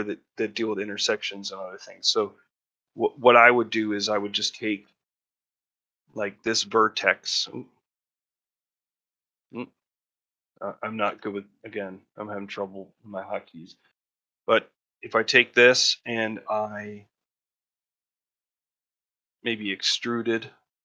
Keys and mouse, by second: 6.1 middle click, 6.8 Tab, 7.3 Tab, 7.8 middle click, 10.9 1, 11.9 middle click, 12.3 shift+middle click, 12.6 ctrl+middle click, 13.0 shift+middle click, 17.5 middle click, 17.8 ctrl+middle click, 18.3 middle click.